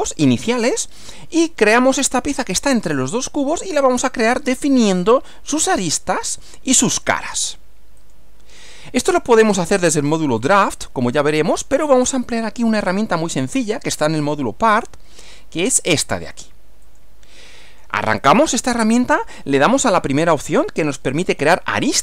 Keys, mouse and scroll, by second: 8.0 click, 16.8 click.